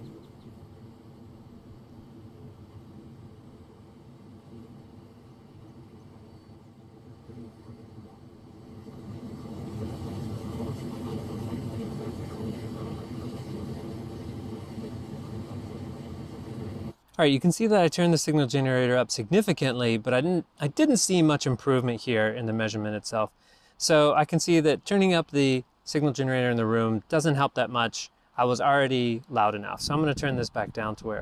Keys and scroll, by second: 4.0 d, 5.6 v, 10.9 v, 16.8 g.